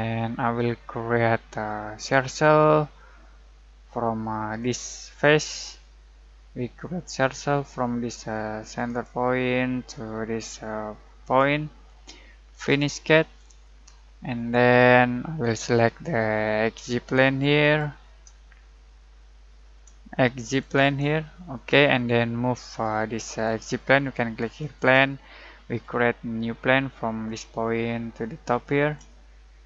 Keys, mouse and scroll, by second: 0.1-1.9 alt+middle drag, 1.9 alt+click, 4.6 alt+click, 5.8-8.8 alt+middle drag, 8.8 alt+click, 11.2 alt+click, 13.4 typing, 14.3-14.7 alt+scroll up 1, 15.2-17.6 alt+middle drag, 17.6 alt+click, 18.8-20.7 alt+shift+middle drag, 20.3 click, 21.5-23.2 alt+shift+middle drag, 22.0 typing, 23.2 alt+click, 25.1-25.4 alt+scroll down 1, 25.4-25.8 alt+scroll up 1, 27.2-29.6 alt+drag.